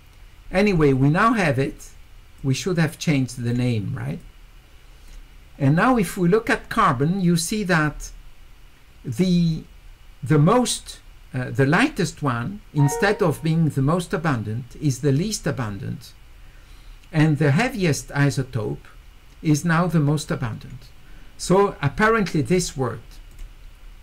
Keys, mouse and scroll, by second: 2.4-3.5 drag, 4.2 click, 7.4 click, 23.3 click.